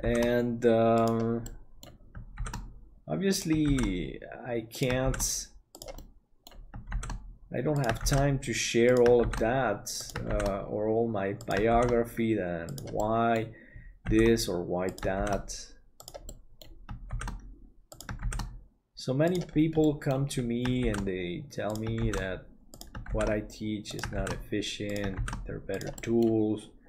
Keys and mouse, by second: 1.5 middle click, 6.0 middle click, 13.1 middle click, 16.2 middle click, 17.2 shift+d, 19.8 middle click, 26.0 middle click.